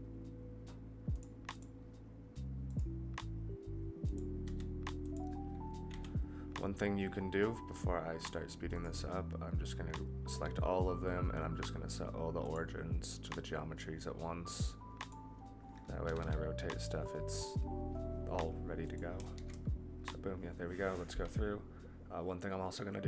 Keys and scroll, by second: 4.4 s, 5.9 a, 16.0 r, 19.3 ctrl+z.